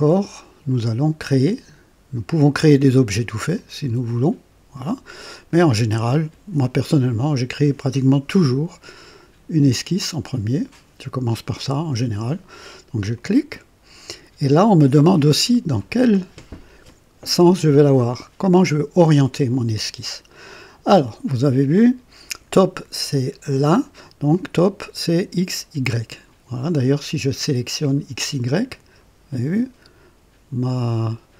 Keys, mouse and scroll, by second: 3.5 click, 5.3 click, 13.1 click, 28.5 click.